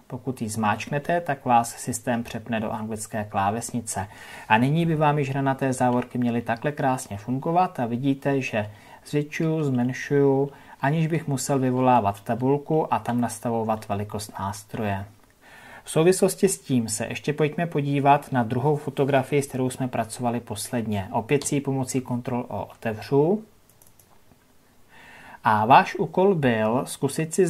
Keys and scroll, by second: 21.3 ctrl+o.